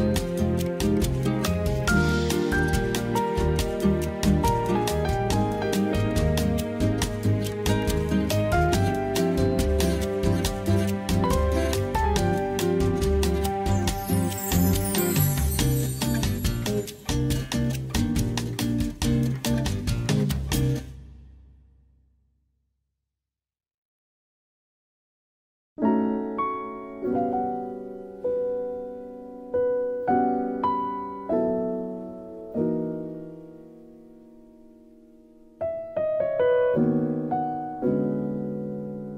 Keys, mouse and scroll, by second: 0.2 Tab, 1.4 click, 2.0 click, 3.0 click, 4.0 shift+click, 4.4 Tab, 4.6 Tab, 7.5 x, 12.7 s, 12.8 z, 13.0 KP_0, 14.2 click, 15.6 e, 20.4 shift+middle click, 20.9 shift+middle click, 22.5 ctrl+r, 22.8 click, 23.7 s, 32.3 middle click, 33.0 middle click, 33.6 KP_3, 36.9 ctrl+b.